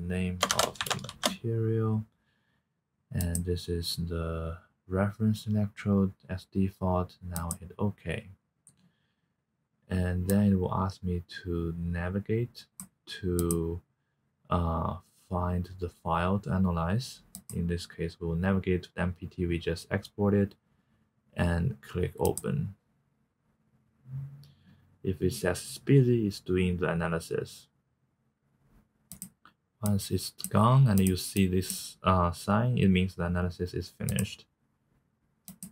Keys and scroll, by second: 0.0-1.1 typing.